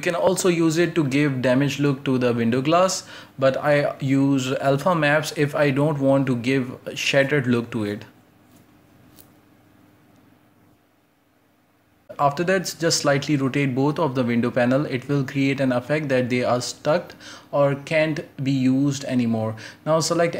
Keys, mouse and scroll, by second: 0.1 right click, 0.2 Tab, 0.4-0.7 scroll down 2, 0.7 alt+h, 0.9 scroll up 2, 1.1 a, 1.2 a, 1.4 j, 1.5 k, 3.7 j, 3.8 k, 10.9 x, 11.2 scroll down 3, 11.3 middle click, 11.4 Tab, 11.6-12.4 middle drag, 12.4 scroll down 1, 12.5 shift+middle drag, 12.8 scroll up 1, 13.0 Tab, 13.0 right click, 13.2-17.2 typing, 13.4 right click, 14.0 right click, 15.7-16.1 right drag, 17.7-18.0 scroll up 1, 18.0 scroll down 5, 18.1 Tab, 18.2-19.0 middle drag, 19.0 scroll up 2, 19.0-19.5 shift+middle drag, 19.6 scroll up 3, 19.7 shift+middle click, 20.2 right click, 20.3 Tab.